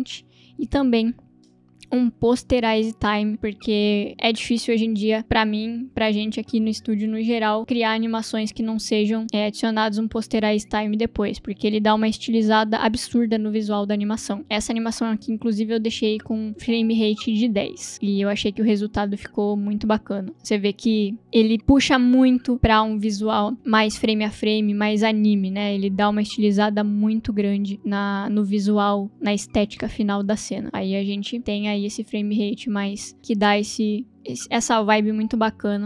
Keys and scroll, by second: 1.6 ctrl+space, 1.8-3.2 typing, 3.3 Return, 15.8 0, 16.5 Return, 17.9 space, 34.5 space.